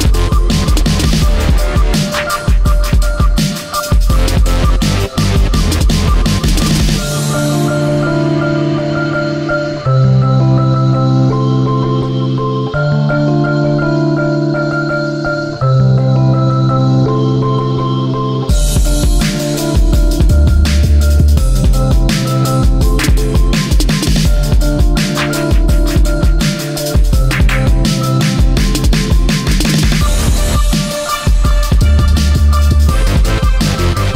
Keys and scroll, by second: 9.1 space, 12.8 ctrl+z, 14.6 space, 19.6 space, 24.9 space, 26.1 ctrl+z, 28.4 space, 31.4 space.